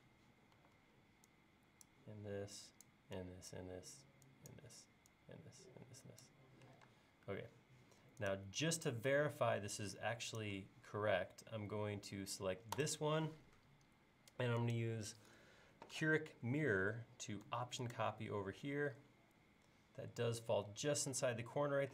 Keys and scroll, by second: 0.6 e, 6.9 space.